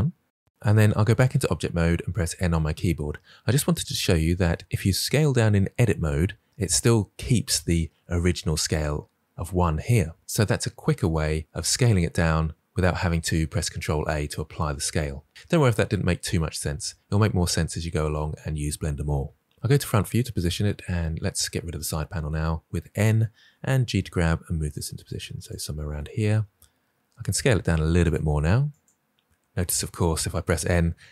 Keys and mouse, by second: 1.0 Tab, 2.1 n, 19.5 KP_1, 21.3 n, 23.4 g, 27.0 s, 28.0 g, 29.5 n.